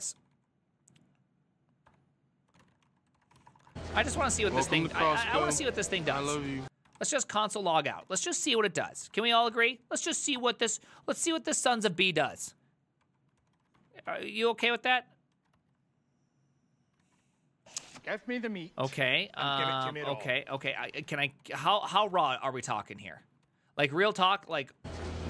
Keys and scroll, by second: 0.0-0.6 typing, 1.9-9.6 typing, 7.7 ctrl+c, 10.4 Return, 11.0 ctrl+a, 11.6 4, 11.9 Up, 12.3 Up, 13.1 Up, 13.4 ctrl+c, 13.6 ctrl+a, 13.8 2, 14.1 Up, 14.7 Return, 15.4 ctrl+a, 17.1 ctrl+a, 17.2 ctrl+a, 17.9 ctrl+a, 18.7-22.7 typing, 19.0 ctrl+c, 23.5 ctrl+c, 23.8-25.2 typing.